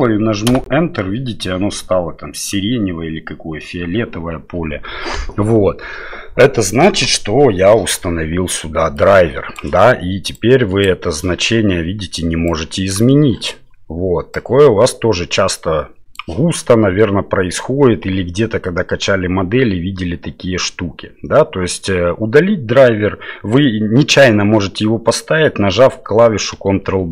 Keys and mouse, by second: 8.9 click, 10.3 click, 12.5 click, 14.3-16.1 drag, 26.5 ctrl+d.